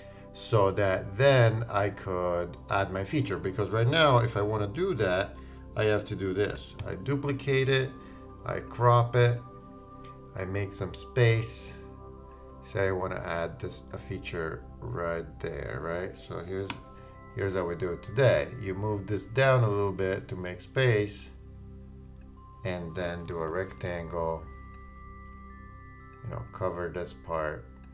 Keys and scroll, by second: 6.8 super+d.